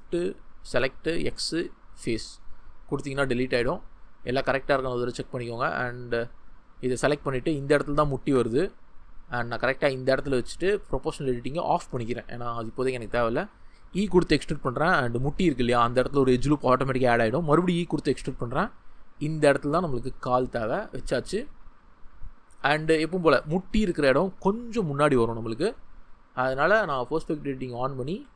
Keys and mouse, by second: 4.4 2, 7.5 shift+middle click, 8.1 g, 9.8-11.1 drag, 13.9 e, 15.0 click, 15.4 shift+middle click, 17.4 e, 20.2 click, 27.2 click, 28.0 g, 28.1-28.3 middle drag.